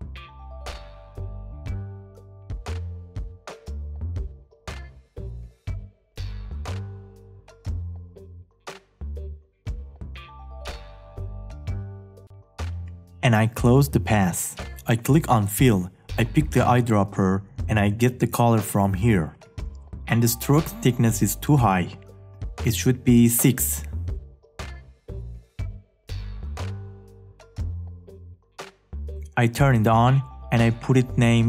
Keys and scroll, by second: 6.3 space.